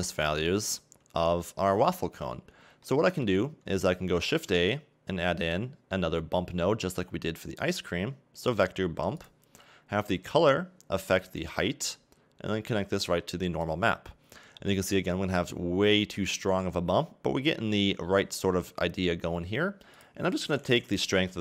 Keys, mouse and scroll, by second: 0.0-0.6 scroll up 1, 0.6-1.4 scroll down 3, 1.4 shift+middle click, 10.1 click, 13.7 click, 14.6-15.1 scroll up 1, 15.6 scroll up 1, 16.3 middle click, 21.3 click.